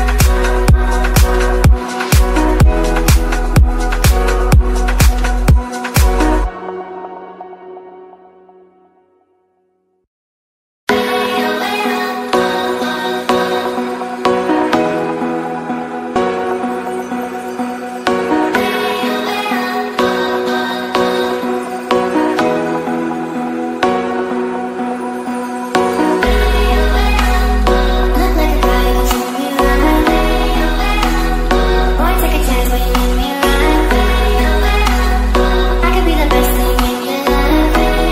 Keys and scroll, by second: 4.3 ctrl+a, 7.9 ctrl+space, 11.2 ctrl+a, 12.2 alt+., 17.8 ctrl+a, 18.1 ctrl+c, 19.5 ctrl+v, 24.1 ctrl+z, 28.1 ctrl+r, 28.5 ctrl+space, 29.8 ctrl+z, 34.6 ctrl+space.